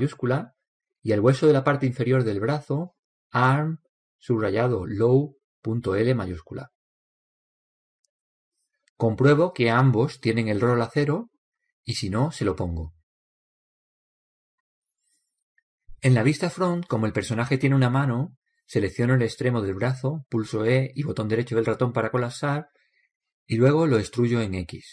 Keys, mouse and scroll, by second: 2.9-4.8 right drag, 3.7 click, 10.3-15.0 right drag, 17.0 KP_1, 20.0-22.0 right drag, 22.0 e, 24.6-24.9 drag.